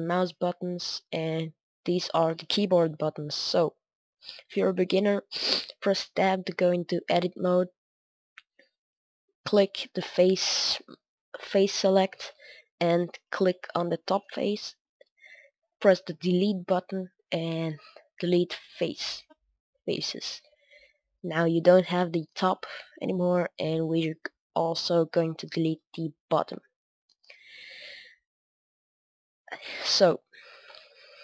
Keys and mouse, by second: 3.1 Tab, 3.7-4.2 middle drag, 4.8-8.5 middle drag, 6.1 Tab, 7.5 a, 8.7-9.3 middle drag, 9.3 click, 12.9 right click, 13.4-14.6 middle drag, 18.6 Delete, 19.5-23.0 middle drag, 23.0-25.1 right drag, 23.8 middle click, 25.1 middle click, 25.7 Delete, 26.2-29.3 middle drag, 29.8-31.2 middle drag.